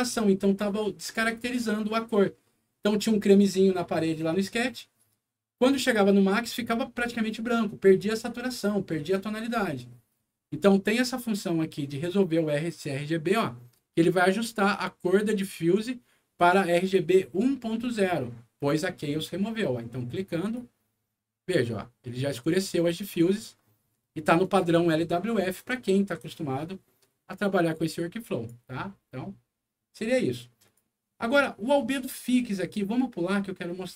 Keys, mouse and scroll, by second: 14.3 click, 20.3 click, 22.8-23.3 scroll up 2, 23.8 scroll down 2, 24.4 click, 24.9 scroll down 2, 28.2 click, 30.6 click.